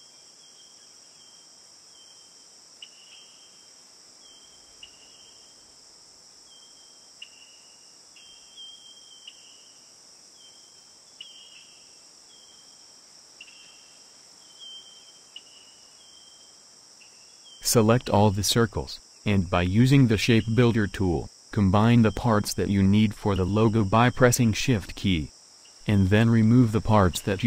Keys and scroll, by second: 13.6 ctrl+9.